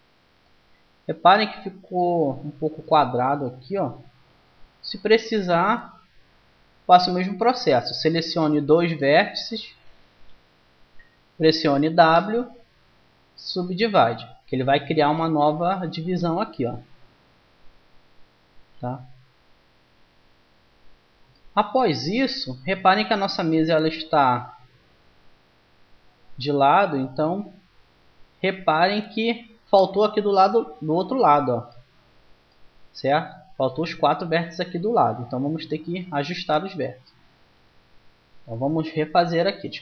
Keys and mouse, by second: 2.7-4.3 drag, 4.0 g, 8.6-11.5 drag, 11.8 w, 16.5 g, 19.7 click, 31.5-37.1 middle drag, 37.3 KP_1, 39.0 ctrl+z, 39.3-39.8 ctrl+z.